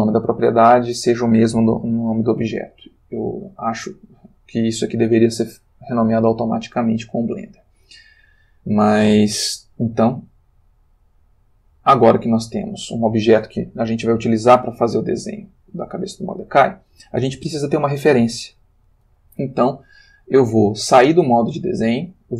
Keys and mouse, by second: 10.8 click, 11.5-12.6 drag, 21.3 click.